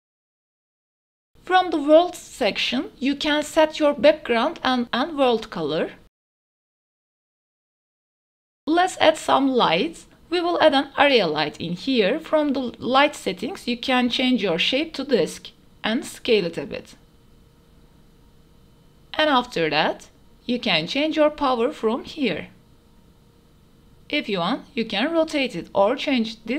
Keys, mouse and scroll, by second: 0.0 KP_0, 0.9 q, 1.0 w, 1.5 drag, 7.3 middle click, 7.8 click, 8.2 ctrl+z, 8.2 Tab, 8.2 shift+s, 8.2 shift+a, 10.9 s, 12.7 click, 13.6-14.8 drag, 15.7 g, 16.0 z, 17.2 s, 20.6-21.8 drag, 21.5 KP_0, 26.4 click.